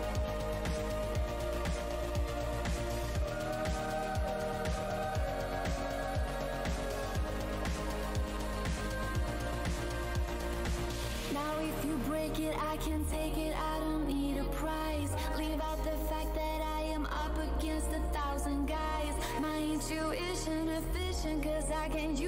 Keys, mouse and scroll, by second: 0.2-1.4 scroll, 1.4 click, 3.2 scroll, 3.2 space, 3.9 space, 4.5 click, 6.8-7.2 scroll down 1, 8.1 click, 8.4 alt+h, 9.9 click, 10.3 ctrl+right click, 12.8-13.1 alt+scroll up 1, 13.7 shift+v, 14.5 click, 14.9-15.4 scroll down 1, 15.6 alt+click, 16.2 alt+shift+w, 16.6 alt+scroll down 1, 16.8 alt+shift+w, 19.7 w, 19.8-20.7 scroll up 1, 20.7 click.